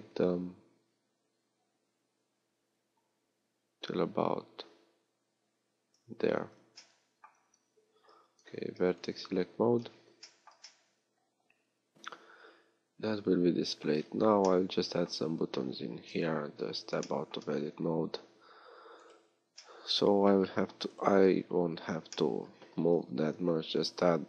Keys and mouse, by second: 6.5 z, 8.1 ctrl+Tab, 12.6-15.1 middle drag, 15.1 a, 16.3 Tab.